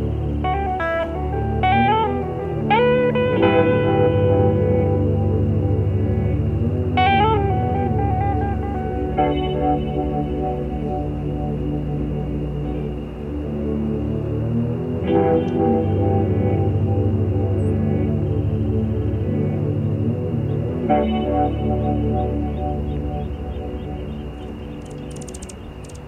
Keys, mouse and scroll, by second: 0.2 shift+click, 1.5 shift+click, 2.4 shift+click, 3.4 shift+click, 4.1 shift+click, 4.6 shift+click, 6.6 ctrl+shift+z, 7.1 ctrl+shift+click, 7.5-10.6 ctrl+shift+drag, 11.2 shift+middle click, 12.7 shift+click, 13.6 shift+middle click, 14.4 shift+click, 14.8 shift+click, 15.2 shift+click, 16.4 shift+middle click, 17.1 shift+click, 18.1 ctrl+shift+z, 19.1 ctrl+shift+z, 19.1 ctrl+shift+click, 19.6-20.7 ctrl+shift+drag, 24.8 shift+click.